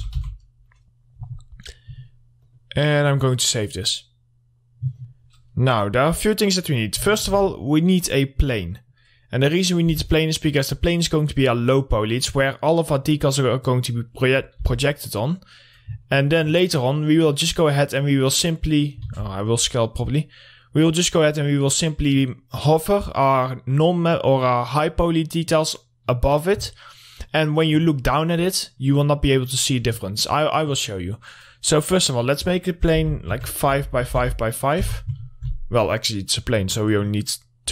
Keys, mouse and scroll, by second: 0.0-0.6 typing, 2.9 click, 7.1-7.6 scroll up 1, 7.6 a, 9.0 click, 9.7 middle click, 10.2 scroll up 1, 10.4 w, 14.4-15.1 scroll up 1, 15.1 r, 16.5 alt+middle click, 17.5-19.5 drag, 19.5 ctrl+z, 19.9-21.6 scroll down 1, 21.6 click, 22.5-24.3 scroll up 1, 24.3 middle click, 25.6-27.0 scroll down 1, 27.0-28.4 middle drag, 28.7-29.7 scroll up 1, 29.7 middle click, 30.1-30.4 scroll down 1, 30.6 alt+middle click, 31.2-32.2 scroll up 1, 32.4 click, 33.3 5, 33.8 Tab, 33.9 5, 34.5 Tab, 34.6 5, 35.3 Return.